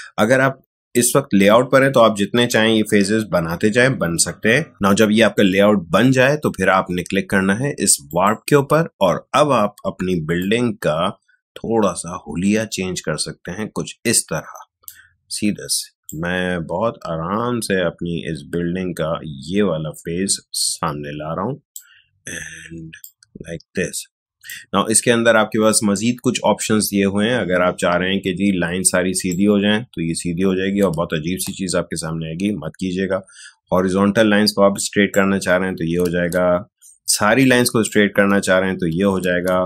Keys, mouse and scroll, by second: 8.0 click, 10.4-26.8 drag, 28.8-31.1 drag, 31.1 ctrl+z, 34.7-36.0 drag, 36.0 ctrl+z, 37.4-39.2 drag, 39.2 ctrl+z.